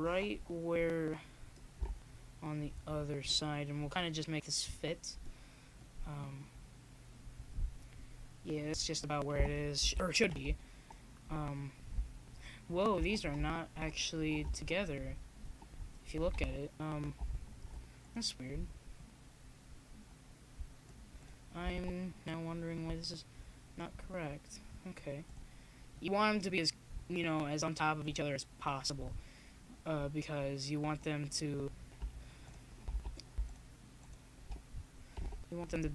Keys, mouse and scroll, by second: 0.2-1.3 middle drag, 2.9 KP_1, 6.3-7.7 right drag, 7.3 x, 10.8 right click, 12.2-15.2 right drag, 14.1-15.2 drag, 15.4 right click, 15.7 click, 32.5 a, 33.9 b.